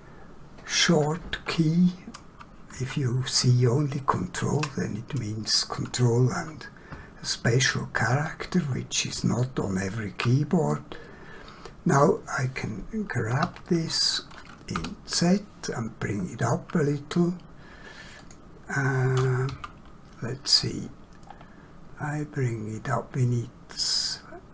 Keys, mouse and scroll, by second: 8.1 scroll down 1, 8.8 scroll up 1, 9.4 shift+middle click, 10.7 middle click, 13.3 g, 14.7 z, 18.2 click, 21.3 scroll up 1.